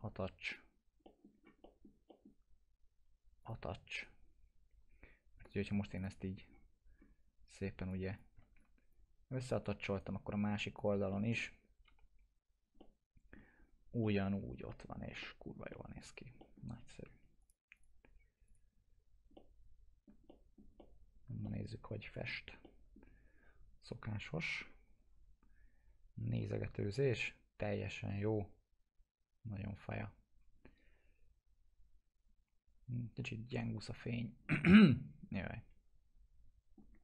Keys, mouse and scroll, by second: 1.0 middle click, 1.3 scroll down 1, 1.6 middle click, 3.4 click, 4.0 right click, 5.4 click, 6.5 scroll down 1, 7.9 click, 8.9-9.2 ctrl+click, 9.9 right click, 10.8 click, 11.1 middle click, 11.8 p, 12.8-13.4 alt+middle click, 13.6 scroll up 2, 14.0-14.6 alt+middle click, 14.9 scroll down 1, 15.2 alt+middle click, 15.7 middle click, 16.1 scroll down 1, 16.4 alt+middle click, 17.4 click, 18.9-19.3 scroll up 1, 19.3-20.6 alt+middle click, 20.8-21.4 alt+middle click, 21.4-22.3 middle click, 34.8-37.0 alt+middle drag.